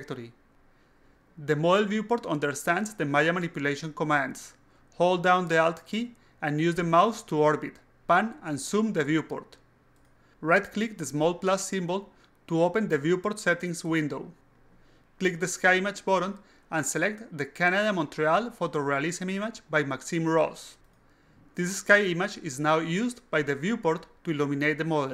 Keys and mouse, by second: 7.4-8.2 alt+drag, 12.9 right click, 14.2 click, 15.7 click, 20.3 click, 21.8 click, 22.5-24.7 alt+drag.